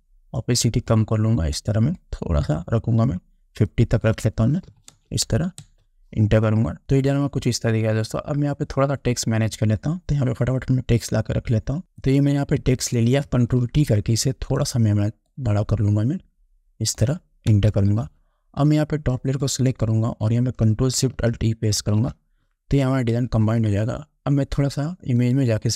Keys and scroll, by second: 4.9 5, 5.1 0, 5.8 Return, 13.8 ctrl+t, 17.7 Return, 21.9 ctrl+alt+shift+e.